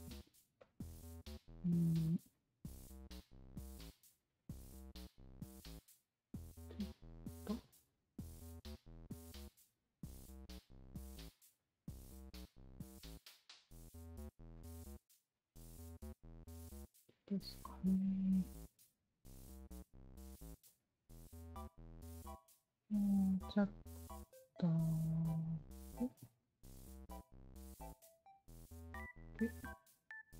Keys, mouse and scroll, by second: 0.6 alt+click, 1.2 alt+click, 2.3 alt+click, 3.2 w, 3.6 alt+click, 4.4-5.7 alt+drag, 6.0 e, 6.8-8.1 alt+drag, 8.3 alt+click, 8.8 alt+middle click, 9.4 alt+click, 11.1 r, 11.5 alt+click, 12.2-13.8 alt+drag, 14.3 w, 14.5 alt+click, 15.9-17.7 alt+drag, 18.0 alt+click, 18.3 alt+middle click, 18.6 alt+right click, 19.0 alt+click, 20.7 alt+click, 21.2 1, 21.6 alt+middle click, 22.0 alt+right click, 22.0 click, 22.5 alt+click, 22.9 alt+click, 23.9 alt+click, 24.9-26.1 alt+drag, 26.8-28.1 alt+drag, 28.7 alt+click.